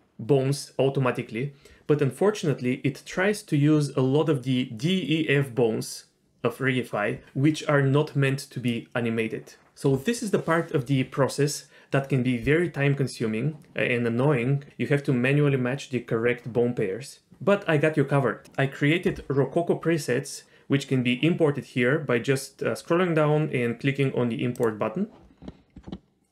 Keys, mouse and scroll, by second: 21.7-22.7 scroll down 1, 24.5 click.